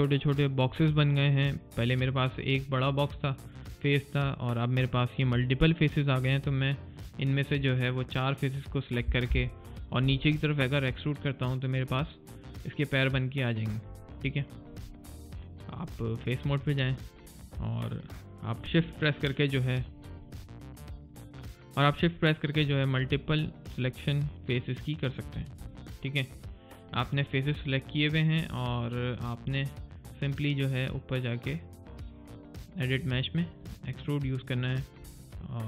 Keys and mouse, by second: 14.3 alt+right click, 17.0 click, 22.5 alt+click, 25.5 alt+right click, 25.9 click, 26.4 middle click, 26.7 click, 27.9 middle click, 28.2 click, 32.1 click.